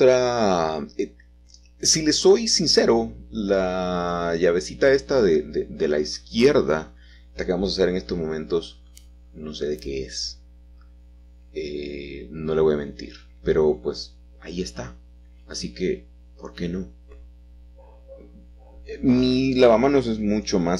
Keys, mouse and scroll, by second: 1.2-2.0 typing, 4.3 click, 5.8-8.7 drag, 5.8 g, 7.5 shift+z, 9.5-10.6 drag, 11.2 s, 12.8 click, 14.0 g, 14.7 z, 15.5 click, 16.9 g, 17.3 shift+z, 19.6 s.